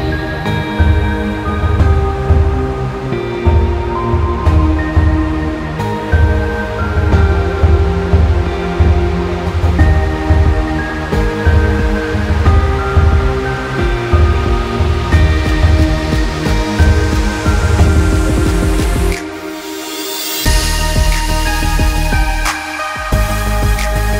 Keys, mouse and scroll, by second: 1.0-2.1 scroll up 1, 2.2 scroll down 1, 2.3 scroll up 1, 2.5-3.0 scroll down 1, 3.0-4.4 scroll up 1, 5.6 click, 9.6 click, 13.3 click, 16.0 click, 18.6 click, 20.5 click, 22.8 click.